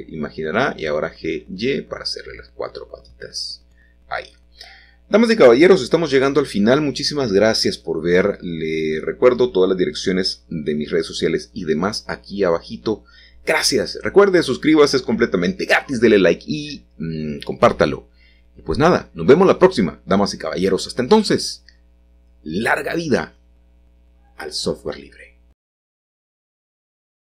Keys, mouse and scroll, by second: 2.5-3.5 drag, 5.4 middle click, 5.7-6.6 scroll down 1, 7.0 middle click, 8.6 alt+h, 9.2-10.9 scroll down 1, 10.9-11.6 scroll down 1, 11.6 middle click, 12.6 middle click, 12.6-13.0 scroll down 1, 13.0-14.0 scroll up 2, 13.6 shift+middle click, 14.7 middle click, 16.3 shift+middle click, 16.3-16.9 scroll down 1, 16.9 shift+middle click, 19.3 middle click, 22.1 middle click, 24.7-25.9 scroll up 1, 26.3-27.3 drag.